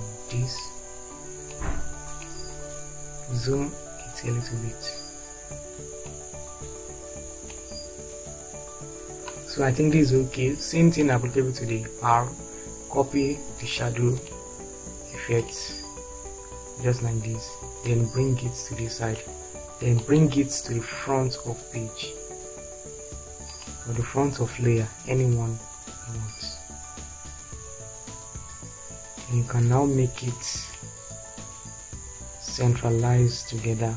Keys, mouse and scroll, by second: 27.2 Down, 29.5-33.9 drag.